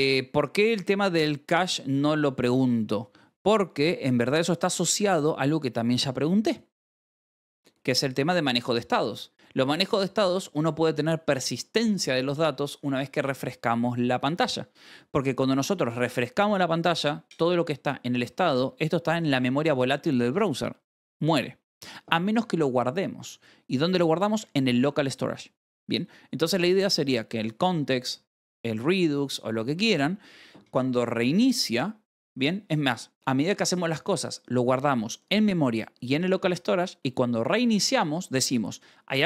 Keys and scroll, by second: 2.0 k, 3.9 k, 4.2 k, 7.5-9.3 typing, 9.0 Escape, 17.4-19.7 typing, 20.8 Escape, 25.4 k, 26.8 shift+v, 27.5 Escape, 27.8 j, 29.5 Escape.